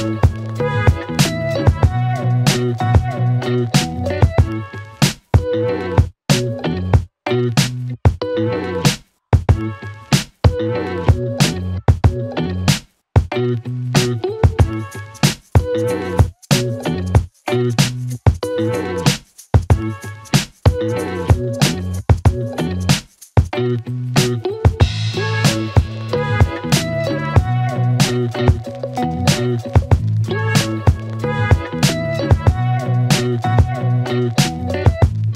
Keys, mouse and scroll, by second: 1.5-2.8 typing, 3.8-7.1 click, 8.2-9.5 scroll up 1, 10.0-12.4 click, 14.5 Return, 17.0-28.5 click, 32.4 alt+Num_Lock, 34.5 alt+click.